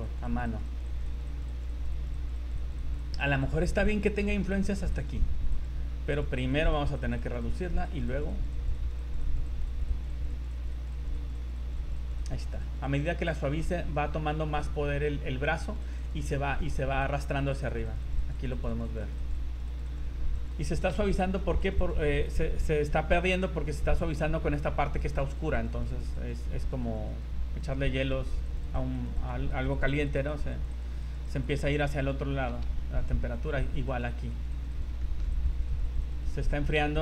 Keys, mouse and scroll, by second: 0.1 click, 0.3 click, 0.5 click, 0.7 click, 0.9 click, 1.1 click, 1.3 click, 1.5 click, 1.7 click, 1.9 click, 2.1 click, 2.5 click, 2.7 click, 2.9 click, 3.1 click, 3.3 click, 3.5 click, 3.7 click, 3.9 click, 4.1 click, 4.3 click, 4.5 click, 4.7 click, 4.9 click, 5.5 click, 6.6 click, 6.8 click, 7.0 click, 7.2 click, 7.4 click, 7.6 click, 8.0 click, 8.2 click, 8.4 click, 8.6 click, 8.8 click, 9.0 click, 9.2 click, 9.6 click, 9.8 click, 10.0 click, 10.2 click, 10.4 click, 10.6 click, 10.8 click, 11.0 click, 11.2 click, 11.4 click, 11.6 click, 11.8 click, 12.0 click, 12.2 click, 12.4 click, 12.6 click, 13.0 click, 13.2 click, 13.4 click, 13.5 scroll down 2, 15.1 scroll up 3, 15.4 click, 15.7 click, 15.9 click, 16.0 click, 16.2 click, 17.0 click, 17.5 click, 17.7 click, 17.8 click, 18.0 click, 18.2 click, 18.4 click, 18.6 click, 18.7 click, 18.8 click, 19.1 click, 19.3 click, 19.5 click, 19.7 click, 19.8 click, 20.5 click, 20.5 click, 21.1 shift+middle click, 21.6 click, 21.9 click, 22.1 click, 22.3 scroll up 2, 25.0 click, 25.3 click, 25.4-25.9 click, 25.7 click, 26.1 click, 26.6 click, 26.8 click, 27.1 click, 27.6 click, 28.0 click, 28.3 click, 28.6 click, 28.6 click, 28.9 click, 29.2 click, 29.5 click, 29.8 click, 29.9 click, 30.2 click, 30.3 click, 30.5 click, 30.7 click, 31.0 click, 31.2 click, 31.4 click, 31.6 click, 31.8 click, 32.0 click, 32.3 scroll down 3, 32.8 shift+middle click, 33.1 shift+scroll down 1, 33.1 scroll up 2, 33.3 click, 33.7 click, 33.9 click, 34.1 click, 34.5 click, 34.7 click, 34.9 click, 35.0 shift+middle click, 35.3 click, 35.7 click, 35.9 click, 36.1 click, 36.4 click.